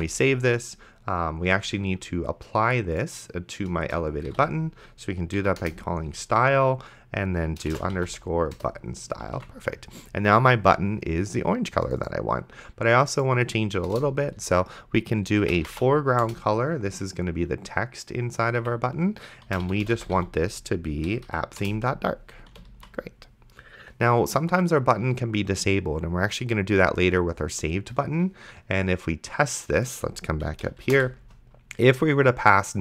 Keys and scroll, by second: 0.2 ctrl+s, 3.9 Return, 4.2 s, 4.6 t, 5.4 Down, 5.6 Return, 7.8-8.7 typing, 9.6 ctrl+s, 14.2 Return, 15.2-16.2 typing, 18.6 Escape, 19.4-20.7 typing, 21.1 Down, 21.6 Return, 22.5 ,, 23.0 ctrl+s, 31.1 alt+shift+Down.